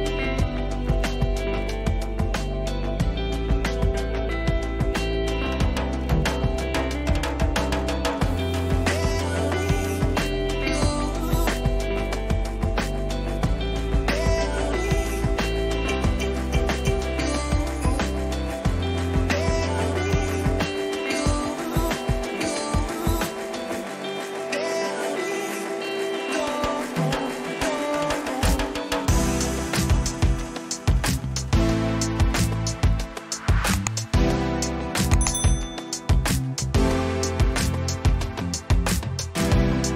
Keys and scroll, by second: 0.4 Return, 9.8 Return, 10.9 ctrl++, 11.3 Up, 13.3 Down, 15.2 ctrl+t, 16.1 Return, 22.4 Return, 23.4 ctrl+alt+z, 39.8 Down.